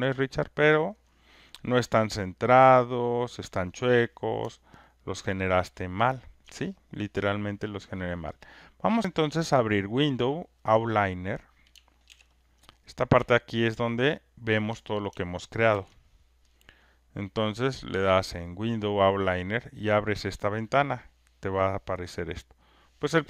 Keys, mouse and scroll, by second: 0.7 alt+click, 4.9 alt+right click, 6.4 click, 9.9 click, 12.1 ctrl+F1, 12.1 ctrl+F2, 12.7 click, 15.7 ctrl+F1, 19.7 click, 22.8 click.